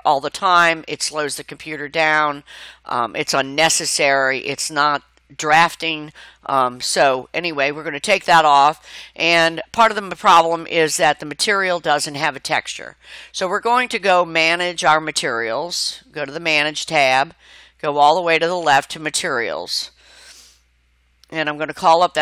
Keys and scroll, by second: 3.8 Escape.